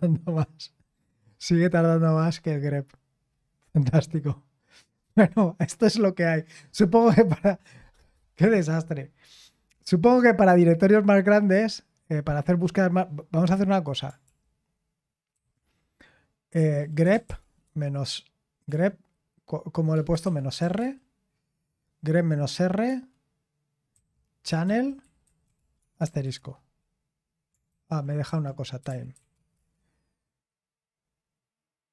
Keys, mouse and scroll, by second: 14.2 ctrl+p, 15.3 ctrl+c, 16.5-18.6 typing, 20.2-20.6 typing, 22.8 typing, 23.9-27.7 typing, 27.7 ctrl+c, 29.3-30.0 typing.